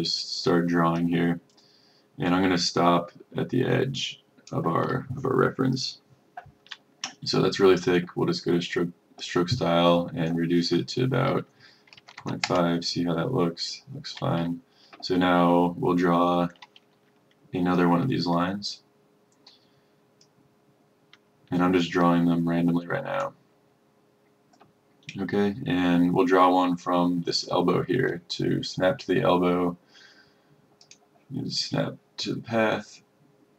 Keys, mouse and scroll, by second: 12.0 KP_Decimal, 12.2 KP_5, 20.3-33.5 drag.